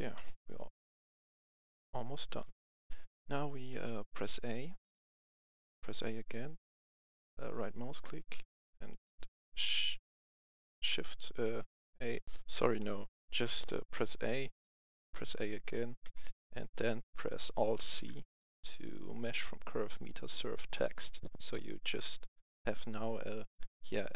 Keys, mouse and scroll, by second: 0.0 KP_1, 2.6 scroll up 1, 3.1 scroll down 1, 3.7 a, 4.8-5.6 typing, 7.4 right click, 8.9 shift+right click, 12.2 a, 12.2 F10, 12.8 middle click, 13.9 a, 16.0 KP_1, 17.7 alt+c, 20.8 click.